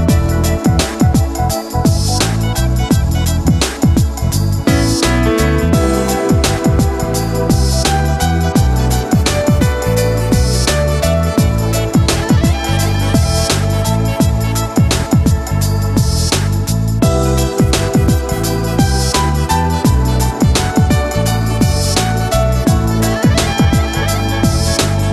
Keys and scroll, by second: 16.1 ctrl+d.